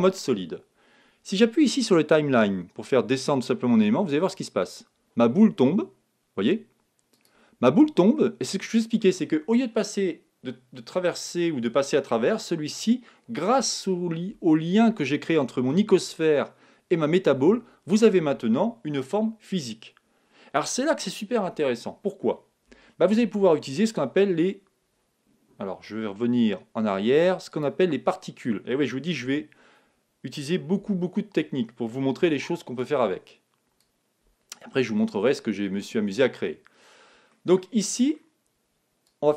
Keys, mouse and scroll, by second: 4.3-6.2 drag, 7.1-8.9 drag, 8.2-10.1 middle drag, 22.6 KP_1, 27.5-29.3 drag, 29.3 a, 30.8 z, 32.3 b, 37.3-39.0 middle drag, 39.0-39.3 drag.